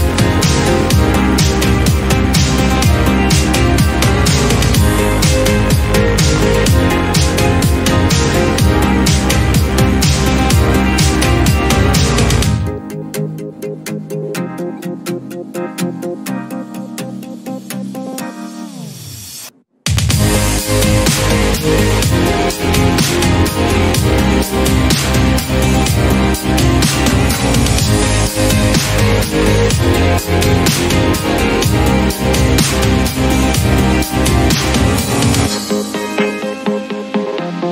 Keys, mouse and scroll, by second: 0.4-1.0 scroll up 3, 1.0-2.6 drag, 3.5-5.0 drag, 5.0 BackSpace, 6.2 click, 7.4-9.0 drag, 9.3-9.9 scroll down 8, 9.9 shift+middle click, 11.4 click, 11.9 click, 12.8-14.6 drag, 14.7-17.9 drag, 19.9-20.7 scroll up 9, 20.2 shift+middle click, 20.7 shift+middle drag, 21.8 click, 22.4-23.0 scroll up 2, 23.0-26.2 shift+drag, 26.4-28.0 drag, 29.5-31.1 drag, 31.6-33.2 drag, 34.4-35.9 scroll down 14, 35.9 click, 36.4 scroll up 2, 36.6 scroll down 1, 36.8-37.6 middle drag, 37.6-37.7 scroll up 1.